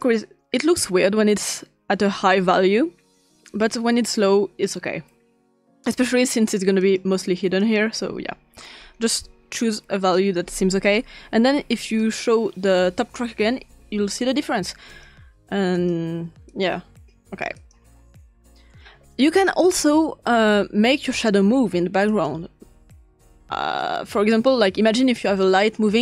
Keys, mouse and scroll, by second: 0.0 click, 0.2 click, 3.6 click, 4.0 click, 6.8 click, 7.6 click, 8.1-8.8 drag, 11.9 click, 14.9 click, 16.0 click, 16.5 click, 17.5 click, 18.2 click, 22.1 click, 24.4 click.